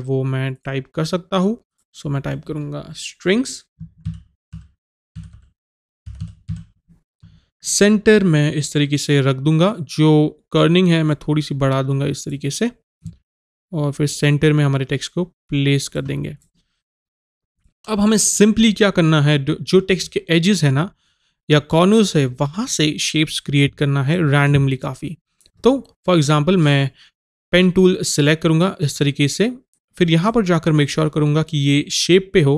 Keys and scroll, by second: 3.9 Caps_Lock.